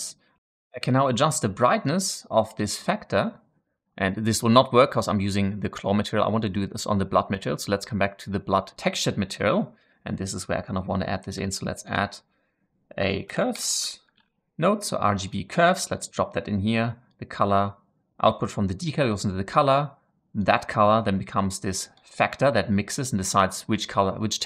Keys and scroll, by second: 11.3 shift+a, 13.2-14.2 typing.